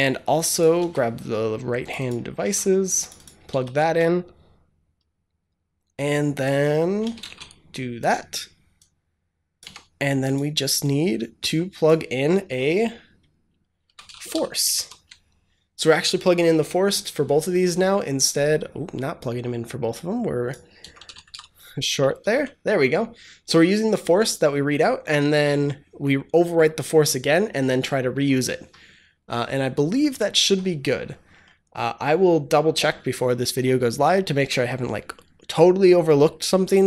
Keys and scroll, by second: 0.7 ctrl+c, 2.3 ctrl+c, 3.4 ctrl+v, 3.7 ctrl+s, 6.9 Return, 7.2 shift+], 9.5 Tab, 13.5-14.7 typing, 14.7 ctrl+s, 20.4-21.7 typing, 21.8 Return, 22.1 ctrl+s.